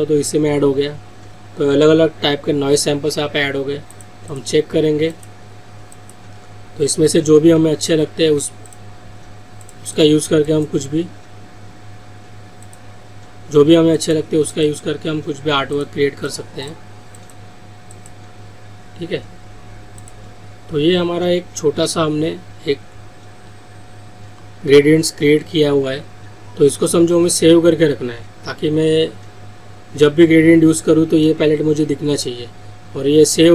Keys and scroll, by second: 7.3 ctrl+z, 8.1 ctrl+alt+z.